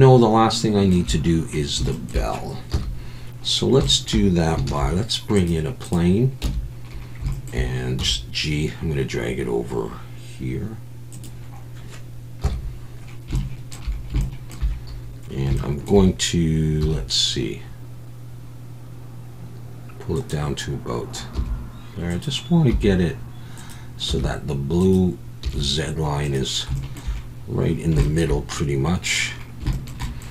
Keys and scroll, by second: 2.7 KP_1, 4.7 shift+a, 6.4 Tab, 8.0 g, 12.4 KP_1, 16.8 g, 21.4 g, 22.7 g, 24.1 g, 25.4 g.